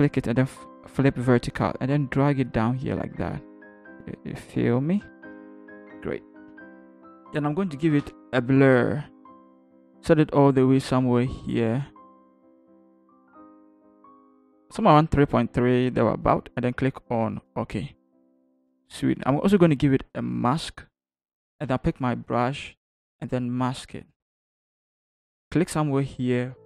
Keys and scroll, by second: 5.3 shift+Return, 6.5 Up, 7.2 ctrl+Up, 8.0 ctrl+b, 21.6 b.